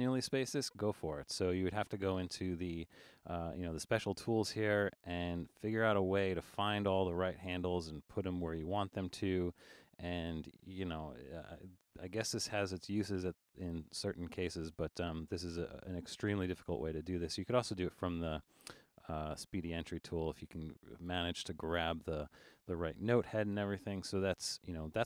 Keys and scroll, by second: 12.1 super+z, 12.9 super+z, 22.2 super+z.